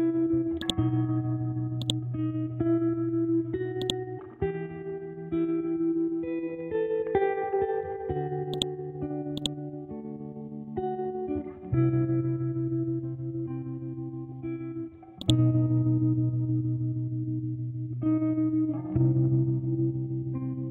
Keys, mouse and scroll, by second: 6.0 e, 7.2 ctrl+g, 8.5 shift+click, 8.9 c, 9.3 click, 11.2 scroll down 1, 13.9-14.5 scroll down 1, 14.5-15.2 scroll up 1, 15.2 click, 16.4 scroll up 1, 17.1 scroll down 1, 17.5 scroll up 1, 18.2 Up, 19.8 Left.